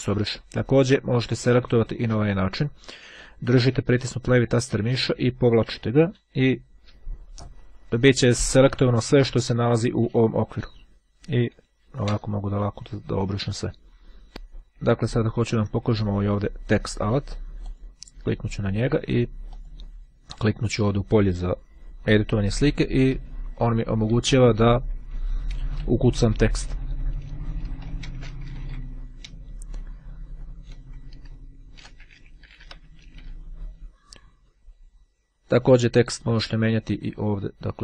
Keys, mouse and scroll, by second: 0.8-1.4 scroll down 2, 1.4-1.7 scroll down 1, 2.1-11.1 drag, 11.4 Delete, 12.1 Page_Up, 14.9-15.5 ctrl+scroll up 2, 17.2 click, 19.5 click, 23.0-26.7 typing, 27.1 Return, 27.8 f, 28.3 r, 28.6 g, 29.1 BackSpace, 31.4-33.7 typing.